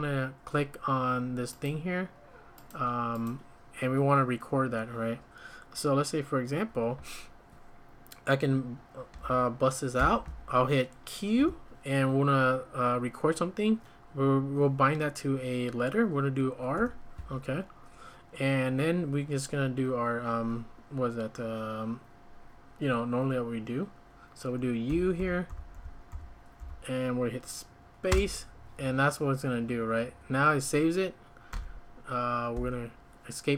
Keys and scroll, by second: 10.0 ctrl+;, 11.4 q, 16.7 r, 24.9-26.6 typing, 28.1 space, 31.5 q, 32.5 Escape.